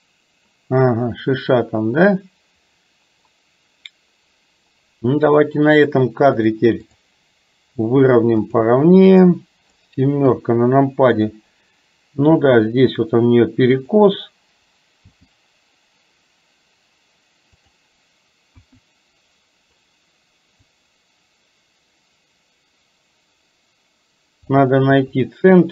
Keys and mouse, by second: 6.7 click, 8.5 click, 9.2 click, 10.3 KP_7, 12.4 r, 15.2 g, 18.6 KP_1, 20.7 click, 21.3-24.7 drag, 24.9 KP_3.